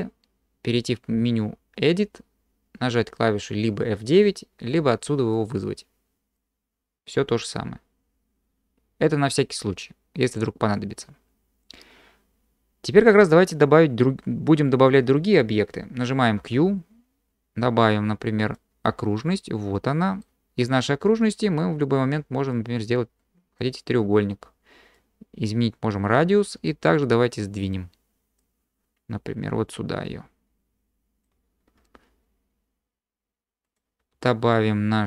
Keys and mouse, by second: 1.8-11.9 drag, 16.4 q, 19.4-20.2 drag, 22.5-23.6 drag, 25.1-26.1 drag, 28.5-31.2 drag, 33.7 click, 34.0 q.